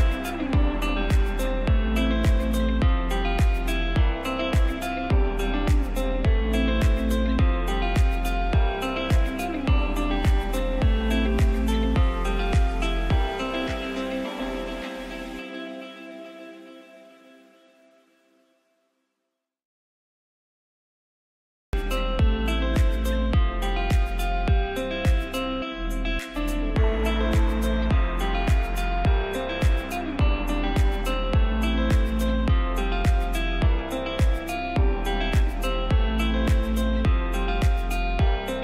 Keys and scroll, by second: 0.8 c, 1.7 Escape, 16.9 space, 18.7 c, 21.7 Delete, 25.2 F2, 26.3 ctrl+g, 34.7 ctrl+z, 37.8 space.